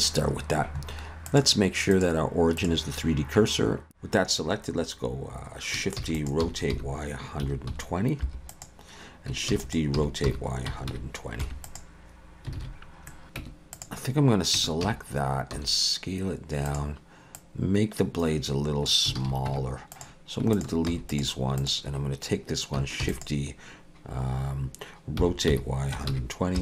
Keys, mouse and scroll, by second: 1.3 click, 4.1 ctrl+z, 6.0 shift+d, 6.4 r, 9.5 shift+d, 10.0 r, 12.6 alt+a, 12.8 scroll down 2, 13.4 Tab, 13.4 middle click, 13.4 x, 13.7 click, 14.6 Tab, 15.5 a, 15.5 s, 17.4 click, 19.2 alt+a, 19.5 Tab, 19.9 click, 20.5 shift+click, 20.9 x, 21.6 click, 23.0 shift+d, 25.2 r.